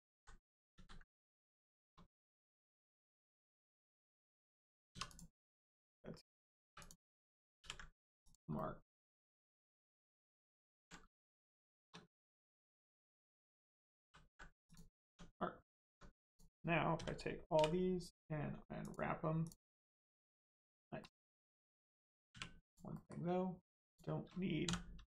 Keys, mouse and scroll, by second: 0.1 ctrl+z, 1.0 middle click, 2.3 middle click, 4.9 2, 5.1 click, 5.4 middle click, 6.6 3, 6.7 click, 8.2 click, 8.5 middle click, 9.5 click, 11.4 shift+click, 14.0 ctrl+e, 14.6 click, 15.3 middle click, 15.9 Tab, 16.2 click, 16.9 a, 18.8 click, 21.0 middle click, 21.5 scroll up 1, 21.8 middle click, 22.3 1, 22.6 click, 22.9 middle click, 23.8 shift+click, 24.6 click.